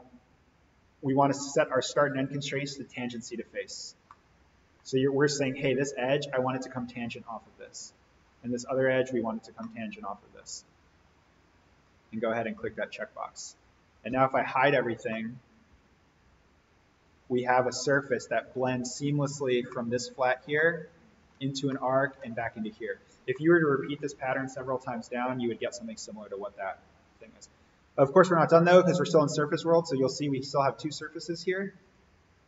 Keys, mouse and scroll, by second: 1.6 click, 3.6-4.1 scroll up 1, 4.1-5.0 middle click, 5.1-7.3 scroll down 1, 7.6 click, 9.3 scroll up 1, 9.7-10.6 middle drag, 11.7 click, 14.1 alt+v, 14.7 click, 15.1-18.5 middle drag, 18.9-19.7 scroll down 1, 19.7-20.3 middle drag, 22.1 scroll down 1, 23.3-23.9 middle drag, 30.2 click.